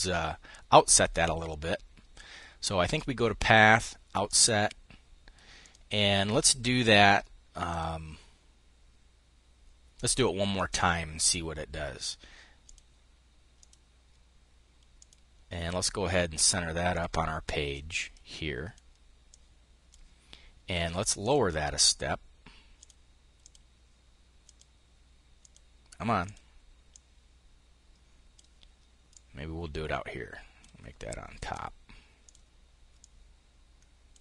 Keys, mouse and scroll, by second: 0.4 click, 3.8 click, 5.2 click, 7.2 click, 10.1 click, 12.2 click, 13.1 click, 14.6 click, 16.0 click, 16.4-17.8 drag, 18.8 click, 20.6-22.0 drag, 22.3 click, 22.9 click, 23.9 click, 24.8 click, 25.7 click, 26.4-30.6 drag, 30.8 click, 31.7 click, 32.5-33.8 drag.